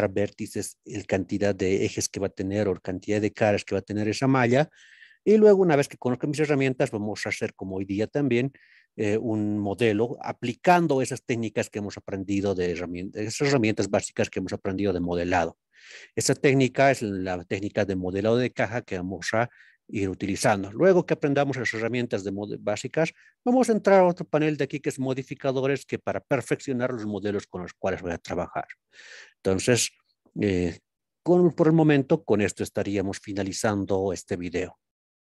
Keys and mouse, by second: 8.5-9.0 middle drag, 9.4-10.0 shift+middle drag, 29.8-30.4 middle drag, 32.1-32.7 middle drag, 33.7 shift+middle drag.